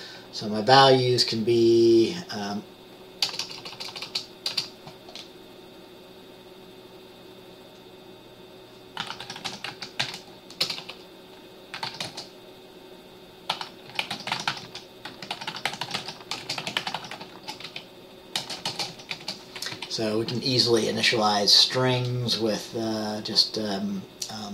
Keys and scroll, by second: 3.3-4.6 typing, 9.1-12.0 typing, 13.6-19.3 typing, 17.4 shift+Caps_Lock, 19.9 Left.